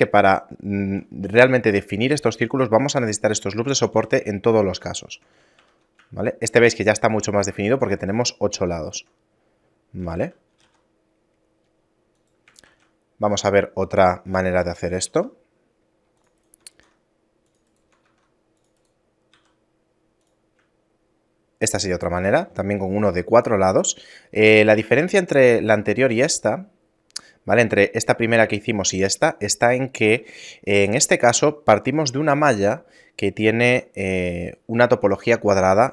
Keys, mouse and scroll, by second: 0.2 shift+right click, 0.5 shift+middle click, 2.9 i, 3.9 a, 4.4 shift+middle click, 5.2 Tab, 5.6 ctrl+2, 6.2 shift+middle click, 7.5 Tab, 9.0 Tab, 10.0 a, 10.6 g, 12.7 shift+a, 14.3 Tab, 15.1 ctrl+r, 16.8 ctrl+r, 18.1 ctrl+Tab, 18.8 right click, 19.4 e, 20.8 shift+middle click, 21.2 shift+middle click, 22.3 g, 23.0 a, 24.2 shift+middle click, 26.3 middle click, 26.9-27.2 scroll down 1, 27.2 middle click, 27.6 scroll down 1, 28.7 middle click, 29.4 middle click, 30.4-30.7 scroll up 3, 31.2 shift+middle click.